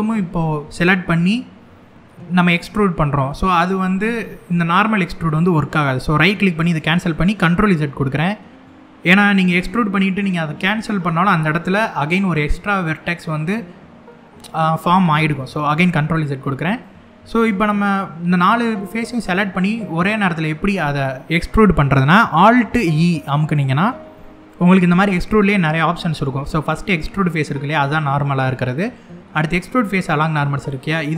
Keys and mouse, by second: 6.2 right click, 15.4 ctrl+z, 16.5 middle click, 23.5 alt+e.